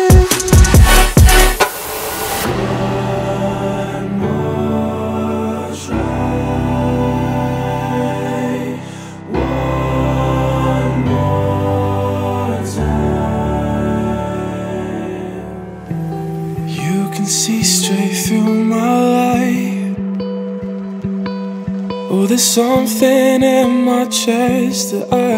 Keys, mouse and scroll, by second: 0.7-1.0 scroll down 2, 1.0-3.1 alt+drag, 3.1-5.0 scroll up 1, 5.0-6.7 drag, 6.7 KP_5, 7.9-8.3 scroll up 1, 8.3-13.2 alt+drag, 13.2-13.5 scroll down 1, 13.5-16.5 alt+drag, 17.9-20.1 drag, 21.6-25.3 drag.